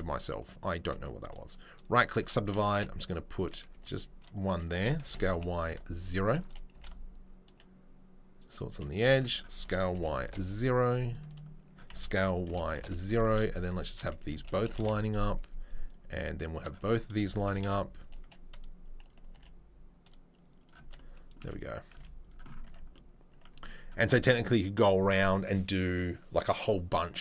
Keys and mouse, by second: 0.3 shift+click, 0.4-1.5 shift+middle drag, 1.5-21.5 right drag, 2.7 g, 3.7 r, 5.0 s, 6.7 g, 8.7 click, 9.5 s, 13.7 click, 19.3 g, 21.4 z, 21.5-27.2 middle drag, 21.9 z, 22.6 Tab.